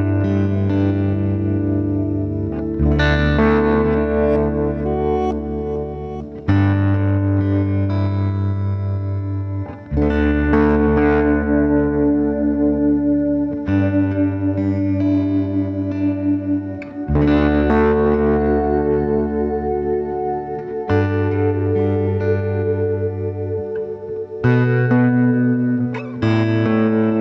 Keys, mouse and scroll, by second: 0.1 middle click, 0.4-1.5 scroll down 4, 1.5 n, 2.1 scroll down 1, 2.4-3.2 middle drag, 3.2-4.1 scroll up 2, 4.1-5.3 middle drag, 5.3 scroll down 1, 5.5-6.4 middle drag, 6.4 shift+a, 8.3-9.0 scroll down 4, 9.0 s, 11.0 g, 12.5-13.4 middle drag, 13.4 d, 14.0 Escape, 14.5 g, 16.4 scroll up 1, 16.7-17.8 shift+middle drag, 17.8 Tab, 18.4 2, 19.0 click, 19.7 e, 22.3 click, 23.2 ctrl+b, 25.2 Tab, 25.6 middle click, 26.3 g.